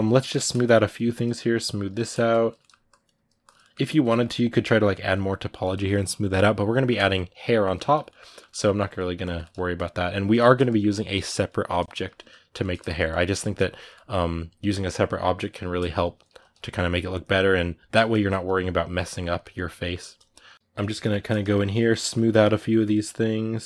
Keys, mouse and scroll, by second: 0.6-2.4 shift+drag, 2.4 middle click, 2.7 shift+click, 3.4-8.6 middle drag, 8.6 shift+click, 9.2 middle click, 9.5-11.7 shift+drag, 11.7-12.8 shift+middle drag, 12.8 shift+click, 13.1-20.5 shift+middle drag, 20.5 KP_Decimal, 20.8 ctrl+middle click, 21.5 shift+click, 21.8 middle click, 22.6-23.6 shift+drag.